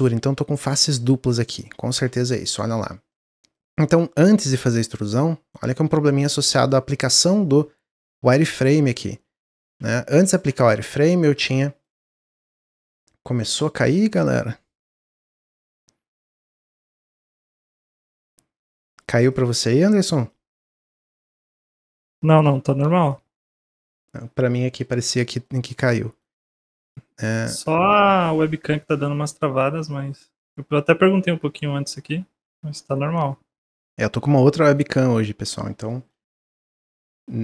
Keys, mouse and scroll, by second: 0.0 click, 0.5 click, 1.9 ctrl+z, 3.0-4.2 middle drag, 4.2 a, 5.9 ctrl+z, 6.2-9.1 ctrl+z, 9.6 ctrl+z, 10.4 Tab, 10.8 middle click, 11.1 scroll down 1, 11.5-12.8 middle drag, 12.8 Tab, 16.4 click, 17.6-19.7 shift+drag, 20.2 shift+click, 20.9-22.1 shift+drag, 22.6 x, 25.4-30.8 middle drag, 33.5 scroll down 1, 33.7-37.4 middle drag.